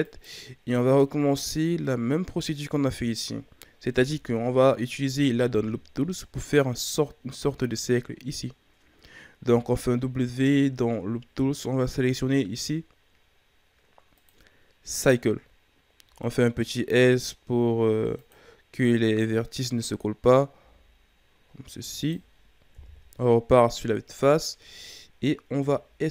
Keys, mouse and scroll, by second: 1.5 scroll down 2, 1.8-3.9 middle drag, 3.9 KP_3, 8.8-9.5 scroll up 2, 9.5 w, 16.0 s, 19.3-19.9 scroll up 2, 20.5 s, 22.7 KP_1, 23.8-24.5 scroll down 5, 25.0-25.6 scroll up 2, 25.6 e.